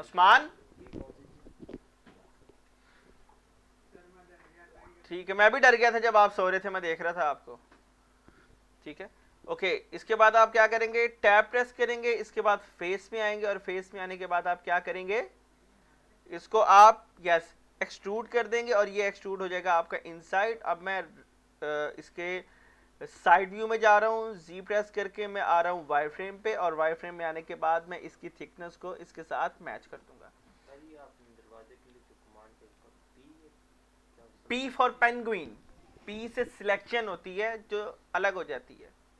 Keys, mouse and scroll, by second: 6.9 click, 7.3 middle click, 7.3 middle click, 11.3 Tab, 13.4 click, 13.7 scroll down 1, 14.0 middle click, 14.3-14.6 scroll up 1, 16.3 scroll down 1, 16.5 middle click, 18.2 e, 19.9 click, 20.4-23.7 middle drag, 24.4-25.4 z, 27.0-30.0 drag, 29.8 middle click, 30.6 Tab, 31.6 middle click, 32.0 z, 32.7 scroll down 1, 33.0-36.0 middle drag.